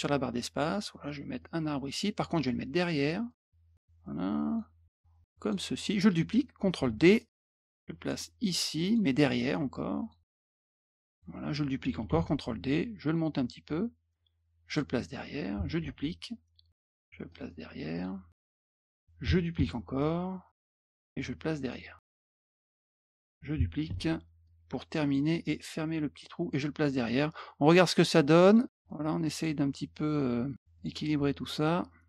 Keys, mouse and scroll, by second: 1.4-2.0 drag, 3.3 click, 4.0 click, 5.2 click, 6.8 ctrl+d, 7.2-8.1 drag, 8.5 click, 10.0 click, 10.8 click, 12.1 d, 12.4-13.1 drag, 14.7 click, 16.2-16.7 drag, 17.3 click, 17.9 click, 18.4-18.8 drag, 19.5 ctrl+d, 20.0-20.5 drag, 20.8 click, 21.7 click, 22.2 click, 23.8 ctrl+d, 24.4-25.1 drag, 26.5 click, 28.4 click, 28.9 click, 30.7 click.